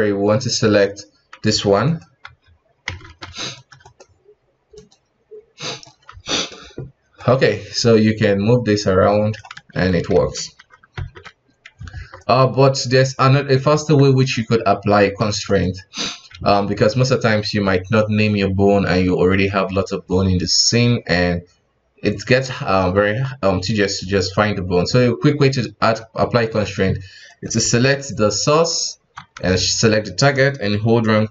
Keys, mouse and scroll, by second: 1.8 right click, 2.2 F2, 3.8 right click, 4.7-6.1 drag, 6.1 KP_1, 7.2 right click, 10.1 a, 10.6 alt+r, 10.9 alt+g, 11.9 ctrl+Tab, 12.2 right click, 12.8 right click, 13.3 right click, 13.7 ctrl+Tab, 14.0 right click, 15.4-16.1 drag, 16.1 alt+a, 26.2-27.3 shift+middle drag, 27.3 right click, 27.6 g, 29.8 shift+right click.